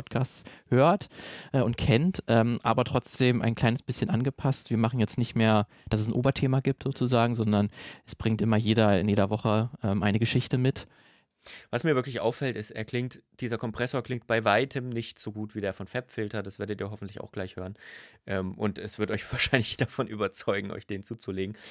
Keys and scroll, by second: 11.1 space.